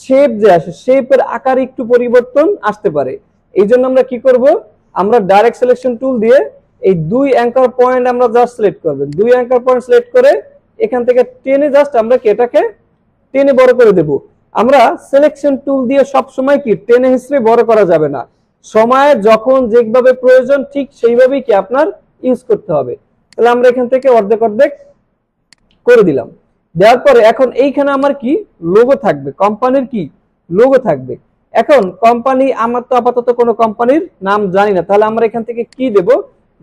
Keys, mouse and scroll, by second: 3.7 click, 4.0 ctrl+z, 5.8 click, 9.1-12.2 shift+drag, 23.3 click, 25.3 alt+scroll down 1, 25.4 space, 25.5-26.4 click, 25.9 space, 27.0 alt+scroll up 1, 27.6 alt+scroll down 1, 27.9 space, 28.1-28.6 click, 28.4 space, 31.0 space, 31.2 alt+scroll down 1, 31.6 space, 31.8 click, 32.1-34.6 space, 35.7 click, 36.0-36.3 space.